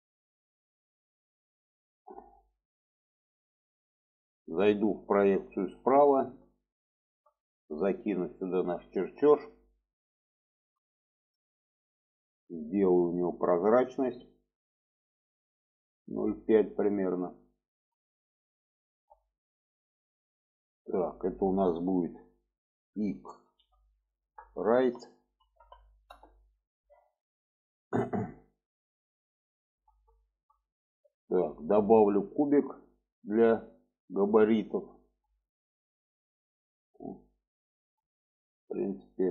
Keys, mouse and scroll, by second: 2.0-2.5 middle drag, 4.2-5.4 middle drag, 5.7-6.2 shift+middle drag, 6.8-7.1 shift+middle drag, 9.9 shift+middle drag, 11.1 shift+middle drag, 12.6 click, 14.2 click, 15.1-17.7 drag, 18.2 shift+middle click, 20.5 click, 20.7-26.6 drag, 28.2 click, 29.0-29.4 middle drag, 30.2 shift+middle click, 30.7 middle click, 32.3-34.8 drag, 35.4 shift+middle drag, 36.5 shift+middle click, 37.4 shift+middle click.